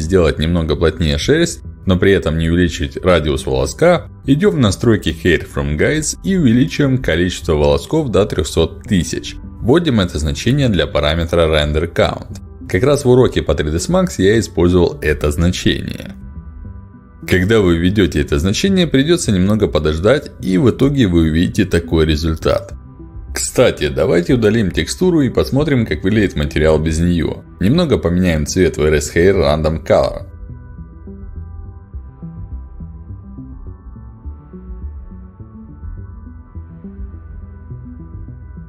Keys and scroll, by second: 1.2 ctrl+alt+d, 4.7 3, 4.8 Return, 28.3 Delete.